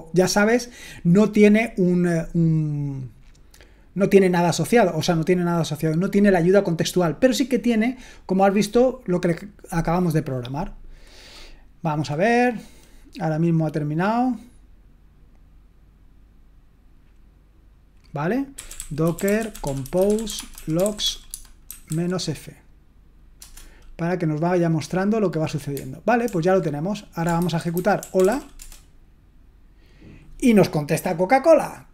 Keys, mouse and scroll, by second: 18.5-22.4 typing, 26.3 super+l, 27.2-28.8 typing.